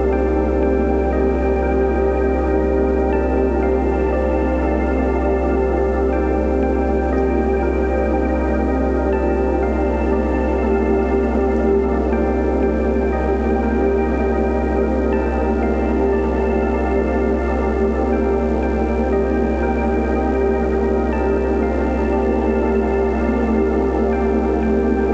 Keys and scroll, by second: 0.1 2, 1.6 1, 3.8 Return, 3.8 ., 3.8 5, 5.7 Right, 6.3 ,, 6.3 5, 6.4 Return, 19.6 ctrl+alt+z, 22.3 ctrl+alt+t.